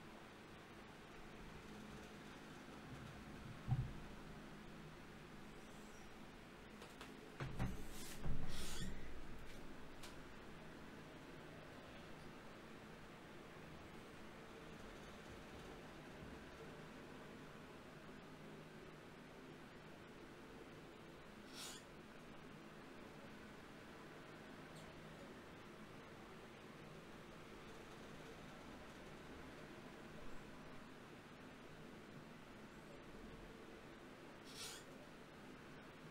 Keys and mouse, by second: 0.8 shift+d, 4.8 g, 6.6-8.4 drag, 8.4-12.1 right drag, 12.1-14.1 drag, 12.1 d, 14.1-16.1 middle drag, 19.7 shift+q, 29.1-31.4 right drag.